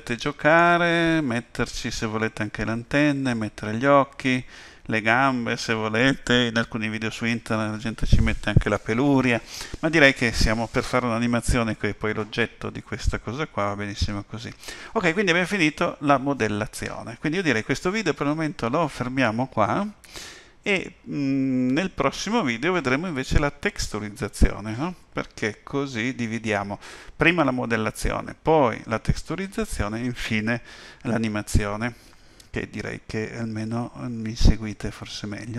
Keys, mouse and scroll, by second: 0.0 middle click, 1.2 KP_7.